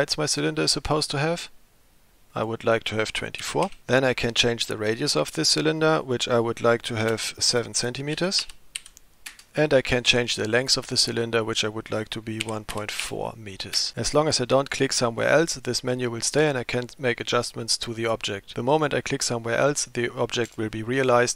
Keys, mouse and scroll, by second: 2.4-3.8 drag, 6.1-9.5 drag, 9.9-13.9 drag.